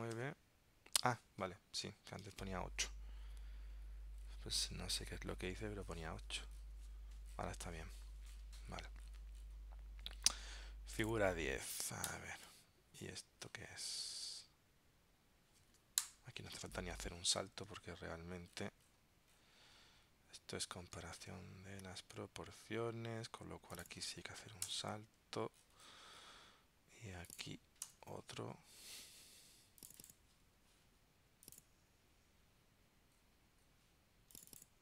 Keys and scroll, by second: 0.3 super+Tab, 2.3 super+Tab, 17.8 super+Tab, 21.3 super+Tab, 24.8 super+Return.